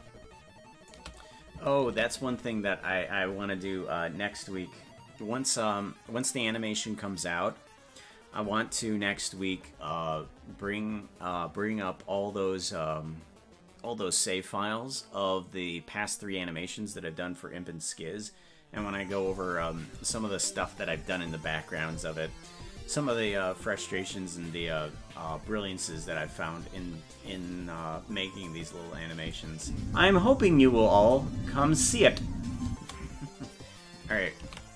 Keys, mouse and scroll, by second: 2.3 ctrl+s, 29.2 click, 29.6 space.